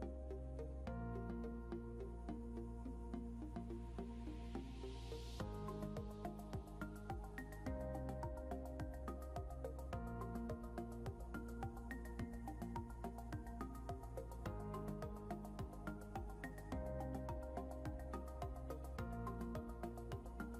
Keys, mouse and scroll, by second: 6.2 click, 10.8-16.2 typing, 18.1 click, 19.5 ctrl+c.